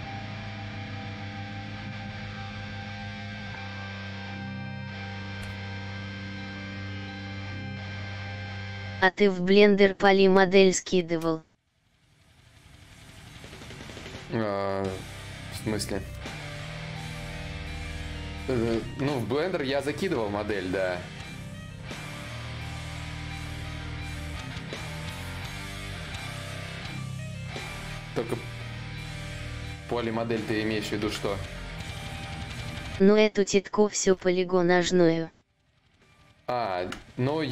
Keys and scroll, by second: 0.0 s, 4.7-6.7 typing, 6.7 ctrl+z, 33.6 ctrl+z, 33.6 y, 35.0 shift+d, 37.2 shift+d.